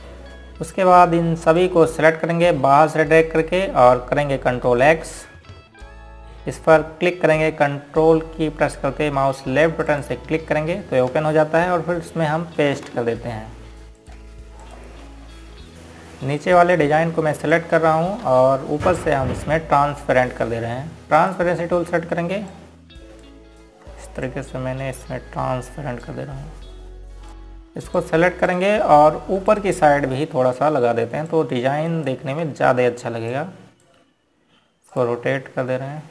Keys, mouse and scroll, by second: 0.7 ctrl+z, 1.5 Delete, 3.3 click, 6.3 ctrl+x, 11.3 ctrl+click, 11.6 ctrl+click, 14.4 ctrl+v, 15.7 ctrl+click, 17.0 scroll up 1, 18.2 click, 19.2 click, 19.9 z, 22.9 click, 24.2 ctrl+click, 25.9 click, 27.7 ctrl+click, 28.3 scroll down 1, 29.6 ctrl+click, 30.2 ctrl+click, 31.1 ctrl+click, 31.7 scroll down 1, 33.0 click, 33.6 right click, 35.0 click.